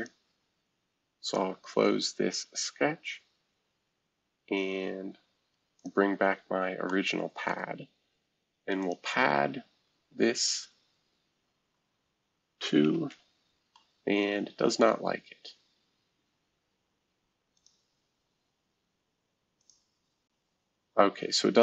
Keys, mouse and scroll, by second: 1.2 click, 4.0-5.5 scroll down 1, 5.7 click, 6.9-7.5 scroll up 1, 7.6-8.8 scroll down 1, 8.8-10.4 drag, 12.8 2, 13.1 Tab, 14.8-16.7 middle drag, 17.5-19.2 drag, 19.6-21.2 drag.